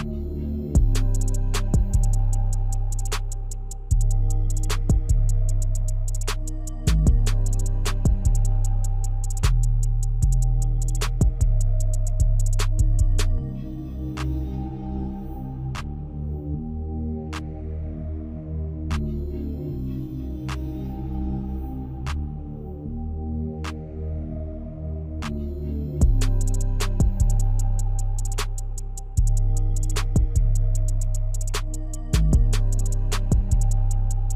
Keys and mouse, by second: 0.6 middle click, 1.5 e, 2.3 e, 2.9 Tab, 3.3 KP_1, 4.1-4.4 shift+middle drag, 4.6 Tab, 5.6 ctrl+r, 9.7 shift+z, 12.2 ctrl+r, 16.9 shift+Tab, 18.2 Tab, 20.0 Tab, 21.1 Tab, 21.7 shift+z, 23.2 Tab, 24.6 ctrl+r, 28.6 Tab, 29.3 Tab, 30.7 click, 32.6 click, 34.2 click.